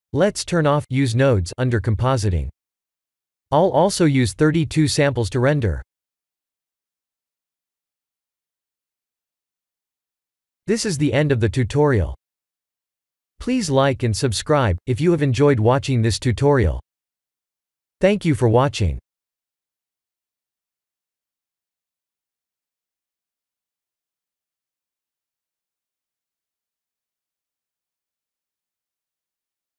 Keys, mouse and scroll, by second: 0.5 click, 1.8 click, 2.2 click, 3.7 click, 6.1 click, 6.6 click, 7.4 ctrl+s.